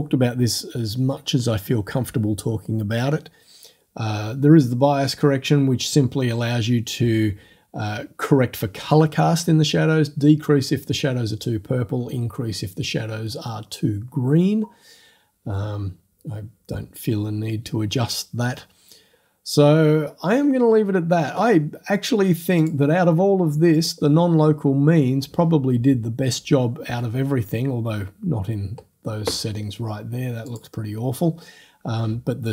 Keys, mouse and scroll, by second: 19.6-20.6 scroll down 5, 22.6 click, 23.8 click, 30.5 click.